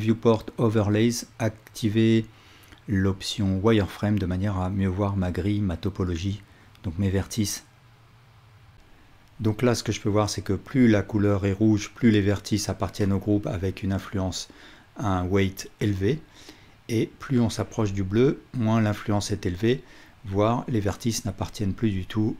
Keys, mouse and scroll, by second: 1.7 click, 2.2-22.3 drag.